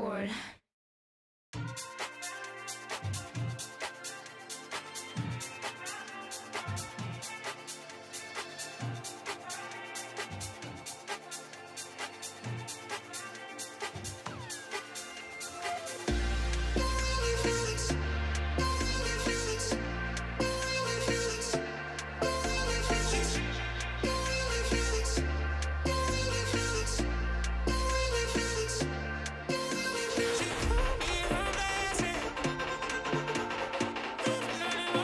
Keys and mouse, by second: 0.4 click, 1.9 click, 5.3 click, 6.7 click, 7.3 click, 11.7 shift+click, 12.6 z, 13.3 click, 15.6-22.9 drag, 19.8 o, 25.0-26.2 drag, 26.8-29.3 drag, 29.7 click, 31.7-33.1 drag, 34.7-35.0 shift+drag.